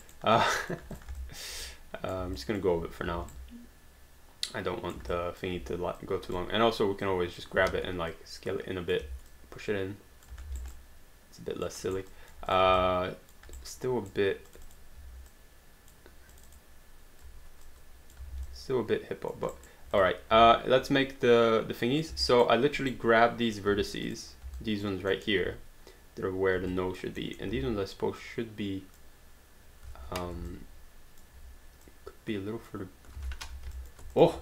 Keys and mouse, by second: 0.1 alt+right click, 0.4 alt+click, 1.6 right click, 2.4 alt+click, 3.3 right click, 5.1 alt+click, 7.1 click, 7.6 r, 8.1 click, 9.0 w, 9.3 click, 10.4 alt+d, 10.7 alt+right click, 11.7 alt+click, 12.1 alt+right click, 12.1 alt+click, 12.9 alt+click, 13.6 right click, 14.5 click, 15.0 w, 15.3 click, 16.4 click, 17.6 click, 18.3 alt+d, 18.5 alt+click, 19.6 alt+right click, 20.0 click, 20.3 space, 22.3 alt+right click, 22.9 right click, 23.5 right click, 23.7 q, 24.1 click, 24.6 alt+click, 25.2 alt+middle click, 26.7 alt+click, 27.2 alt+middle click, 27.5 w, 28.2 click, 30.5 alt+click, 31.9 click, 33.2 ctrl+z, 33.5 q, 33.8 alt+click.